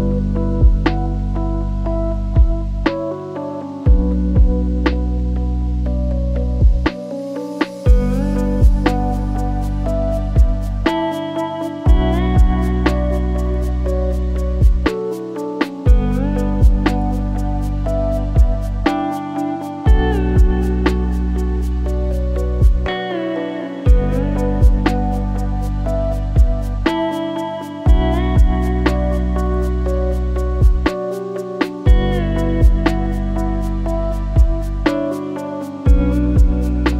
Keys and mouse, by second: 1.3 g, 2.9 s, 5.1-6.0 drag, 6.6-8.5 drag, 12.2 click, 12.9 shift+middle click, 14.1 r, 16.0 r, 19.5 g, 21.4 r, 23.6 click, 24.2 KP_0, 25.8 shift+d, 26.5 r, 28.5 click, 29.9-32.2 drag, 33.3 r.